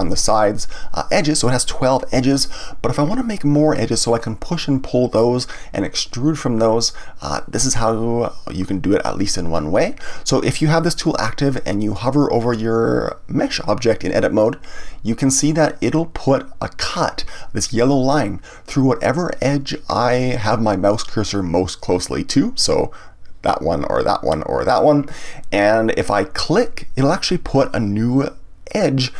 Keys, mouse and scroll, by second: 26.5 click.